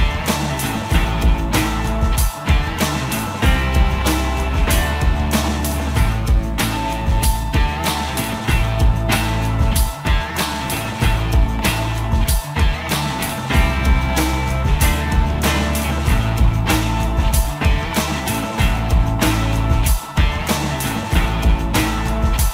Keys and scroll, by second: 6.4 r, 12.4 s.